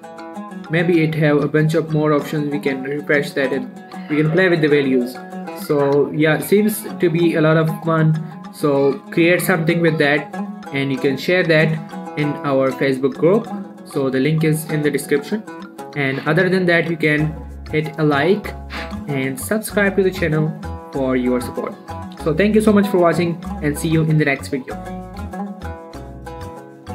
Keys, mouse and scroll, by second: 4.4 click, 8.4 scroll down 1, 8.5 middle click, 8.8-12.7 scroll up 1, 15.6 click, 18.5 middle click, 18.8 shift+middle click, 19.6 click.